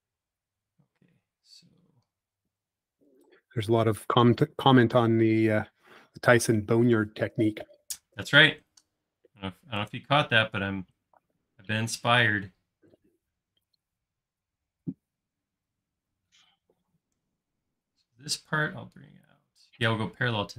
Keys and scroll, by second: 1.1 l, 5.7 |.